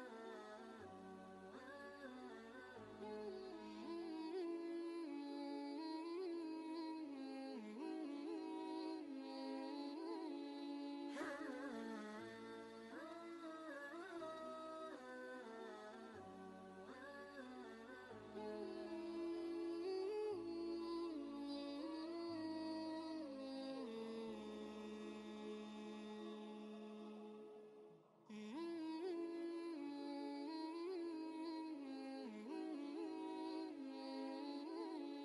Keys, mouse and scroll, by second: 0.3-0.8 typing, 0.4 click, 2.8 typing, 3.8-7.0 drag, 7.0 ctrl+space, 7.1 ctrl+click, 7.5 ctrl+space, 11.6-15.8 drag, 15.8 typing, 16.4 ctrl+space, 16.6 ctrl+click, 17.0 ctrl+space, 19.2 ctrl+space, 19.4 ctrl+click, 19.8 ctrl+space, 20.4-22.3 drag, 25.7 Caps_Lock, 26.8-30.3 typing, 31.8 ., 33.0-34.7 typing.